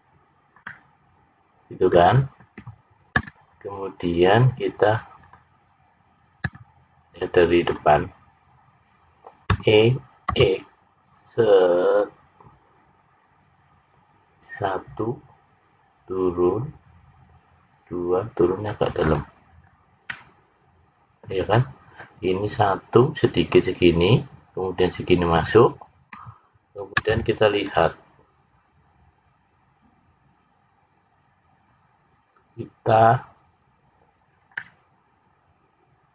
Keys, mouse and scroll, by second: 0.6 middle click, 10.2 e, 20.0 middle click, 34.5 middle click.